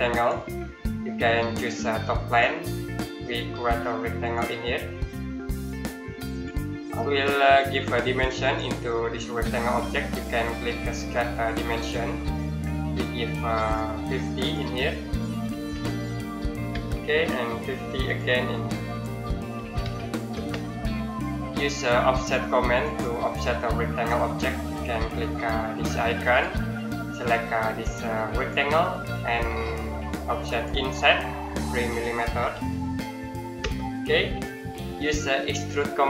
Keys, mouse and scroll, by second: 0.0 click, 11.6 click, 15.3 KP_5, 15.5 KP_0, 16.5 KP_Enter, 17.9 click, 19.4 KP_5, 19.6 KP_0, 20.1 KP_Enter, 22.6 click, 26.1 click, 32.2 KP_3, 33.4 KP_Enter.